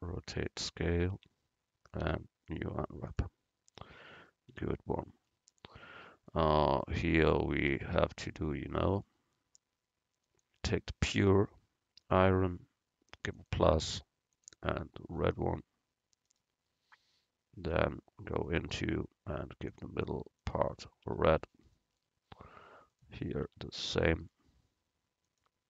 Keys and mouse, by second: 1.2 Tab, 2.1 u, 3.8 click, 4.6 Tab, 7.3-8.9 middle drag, 10.3-12.2 middle drag, 13.4-16.3 drag, 17.8 Tab, 19.1-22.0 drag, 21.2 Tab, 23.6 Tab.